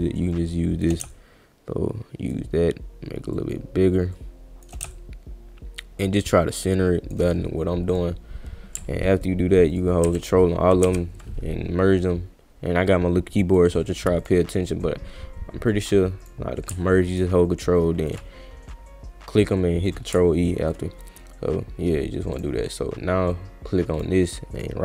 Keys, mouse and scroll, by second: 0.3 shift+click, 1.1-2.3 shift+drag, 3.3 shift+click, 4.1 shift+click, 4.9-7.1 shift+drag, 7.9 click, 9.7 ctrl+click, 10.0 ctrl+e, 12.9 click, 14.2 click, 16.2 click, 17.1 ctrl+click, 19.9 click, 22.4 click, 24.0 click, 24.6 click.